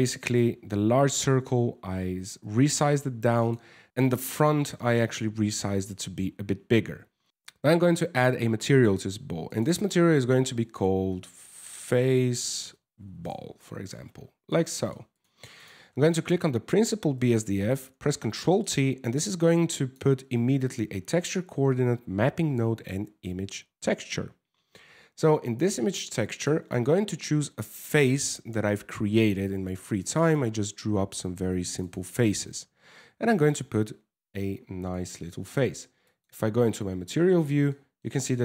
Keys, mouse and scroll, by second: 3.0 right click, 6.5 Tab, 7.3 click, 8.3 click, 9.1 click, 9.3 click, 12.7 l, 14.1 middle click, 14.8 click, 15.2 click, 15.5 scroll down 1, 17.5 ctrl+t, 18.0 middle click, 18.5 scroll up 2, 18.8 click, 25.9 click, 35.8 click, 37.3 shift+middle click, 37.9 middle click.